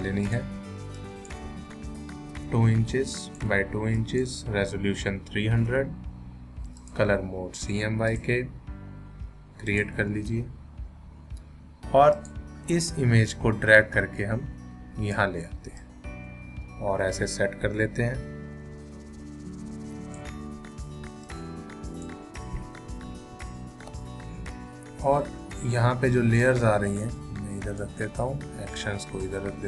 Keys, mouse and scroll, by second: 2.3 2, 3.1 click, 3.6 2, 4.0 click, 4.9-6.2 typing, 6.8 click, 12.1-23.3 drag, 23.3 ctrl+-, 26.4 click, 26.4-29.6 drag.